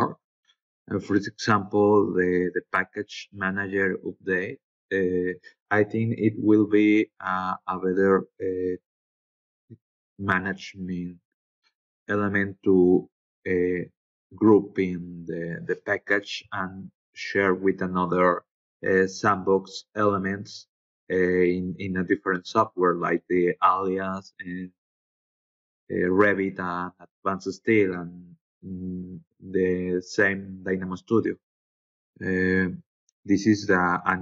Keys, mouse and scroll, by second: 9.2 scroll down 2, 10.0-11.0 scroll down 6, 14.0 scroll down 2, 14.9-15.2 scroll down 4.